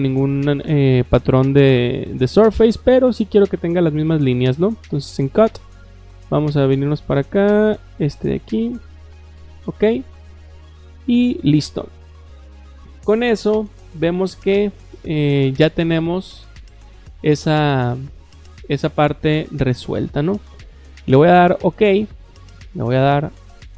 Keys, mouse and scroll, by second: 0.0-0.6 scroll down 2, 5.3 click, 6.3-6.6 scroll down 2, 7.7 click, 8.3 click, 9.5 click, 21.5 click, 23.4 click.